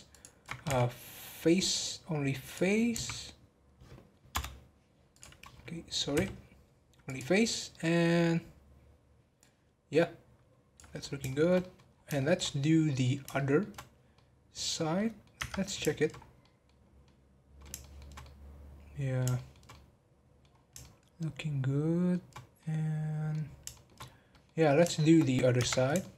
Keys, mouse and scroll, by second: 0.1 alt+shift+click, 7.7-10.9 middle drag, 11.0 scroll down 1, 11.2 middle click, 11.9 scroll down 1, 12.1-13.8 shift+middle drag, 13.8 scroll down 1, 14.1-15.3 middle drag, 15.3 Tab, 15.8-16.1 shift+middle drag, 16.1 scroll up 1, 16.4 middle click, 16.8 scroll up 1, 17.0-20.5 middle drag, 20.5 scroll up 2, 20.8-23.4 shift+middle drag, 23.4 scroll down 1, 23.7-24.0 shift+middle drag, 24.0 scroll down 4, 24.3-25.6 middle drag, 25.6 Tab, 26.0-26.1 shift+middle drag.